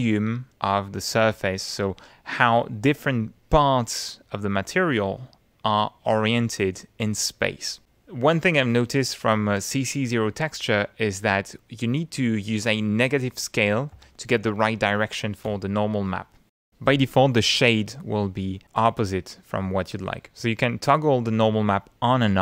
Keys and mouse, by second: 11.9 click, 13.9 -, 14.3 1, 15.5 Return, 18.4 middle click, 20.1 click, 21.4 click, 22.1 click.